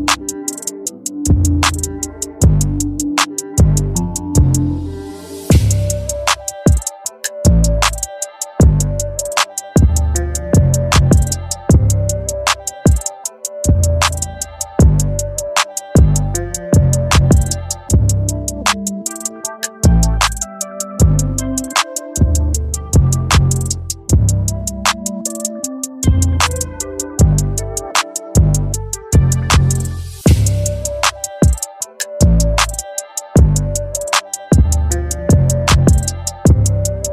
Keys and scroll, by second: 8.5 ], 23.3 [, 31.5 [.